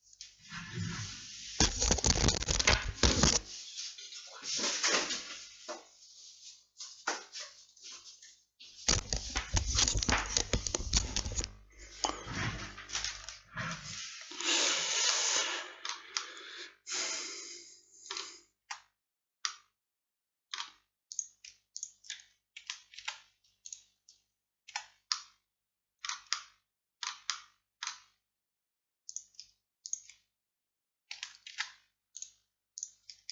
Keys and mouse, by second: 15.2-18.7 drag, 18.7 middle click, 18.7 z, 23.1 alt+m, 24.8 middle click, 24.8 z, 25.7 click, 27.1 click, 29.2-31.6 drag, 31.6 alt+m, 32.8-33.3 drag.